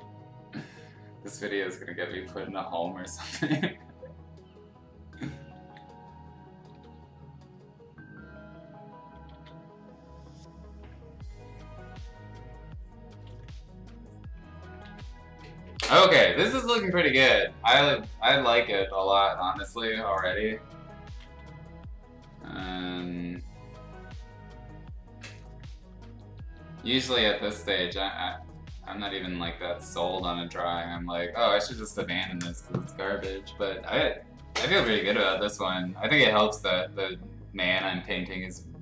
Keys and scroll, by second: 1.4 x, 5.6 ctrl+z, 6.7 x, 9.3 ctrl+z, 10.8 ctrl+z, 13.3 ctrl+z, 14.8 ctrl+z, 18.0-19.4 typing, 21.2 ctrl+z, 22.6 ctrl+z, 22.8 x, 25.9 ], 26.4 ], 27.5 ctrl+z, 30.1 x.